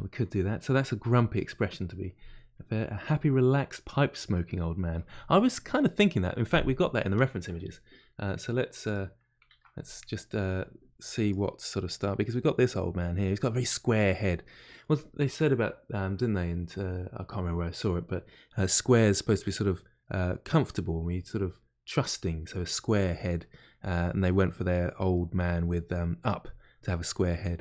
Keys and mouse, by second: 11.7-27.6 middle drag.